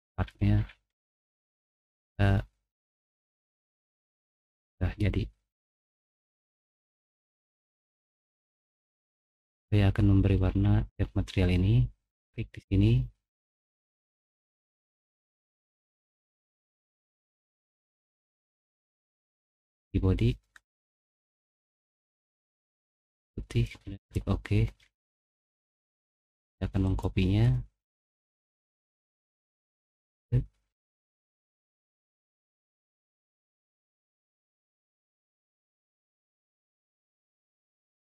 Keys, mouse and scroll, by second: 0.1 middle click, 0.1-0.9 scroll down 3, 0.5 middle click, 0.9 middle click, 1.2 middle click, 1.8-6.0 middle drag, 6.6 middle click, 7.4-8.2 scroll down 2, 8.4 middle click, 11.6 middle click, 12.4 middle click, 14.5 click, 15.5 middle click, 18.3 click, 20.7-21.0 scroll down 2, 23.9 click, 24.7 middle click, 29.4 click, 31.9 click, 35.5 click, 37.6 middle click, 37.9 middle click.